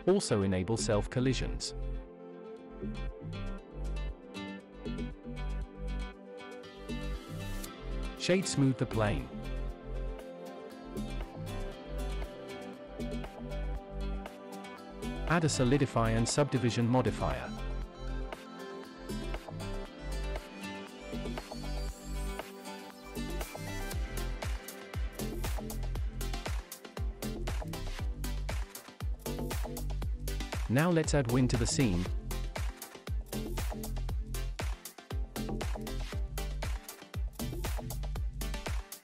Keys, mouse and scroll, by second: 0.2-0.5 scroll down 1, 0.5 click, 3.1 space, 5.2 space, 6.6-7.1 drag, 8.4-10.0 drag, 11.7 click, 13.3 click, 14.4-16.8 drag, 19.7 click, 20.9-22.8 drag, 28.4 shift+a, 36.6 r, 36.9 y, 37.3 KP_9, 37.7 KP_0, 38.2 Return.